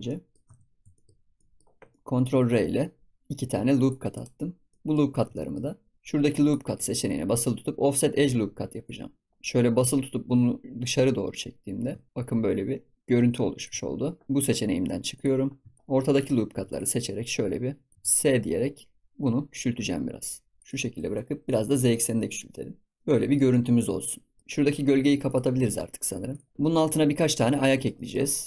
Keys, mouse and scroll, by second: 0.0 middle click, 0.5 Tab, 0.7 scroll up 4, 0.9 shift+middle click, 1.1 scroll down 2, 1.3-2.4 middle drag, 2.4 ctrl+r, 4.4 scroll down 2, 4.6 middle click, 5.0 scroll up 2, 5.2 shift+middle click, 5.6-5.9 scroll up 1, 5.9-6.5 drag, 8.8 click, 9.7-12.5 drag, 14.2 ctrl+z, 15.1 click, 15.4 scroll up 3, 15.7 shift+middle click, 16.1 click, 16.6 alt+shift+click, 16.8 alt+shift+click, 17.8 alt+shift+click, 17.9 s, 23.0-24.4 middle drag, 24.4-26.5 drag, 26.5 scroll down 2, 26.7 ctrl+s, 26.9-27.4 scroll up 4, 27.4 shift+middle drag, 27.6 scroll down 1, 27.8 ctrl+s, 27.9-28.2 middle drag, 28.2 drag.